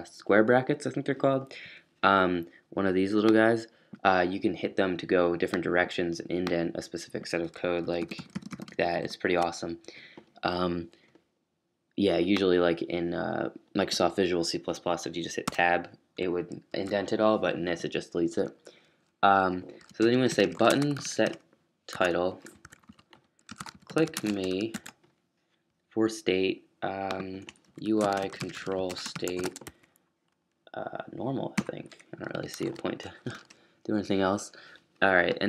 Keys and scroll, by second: 7.8 super+], 7.9 super+], 8.1 super+[, 8.1 super+], 8.4 super+[, 9.0 super+[, 15.4 Tab, 16.2 super+Tab, 16.7 super+z, 18.9-25.2 typing, 21.9 Tab, 27.4-29.9 typing, 31.9-32.6 typing.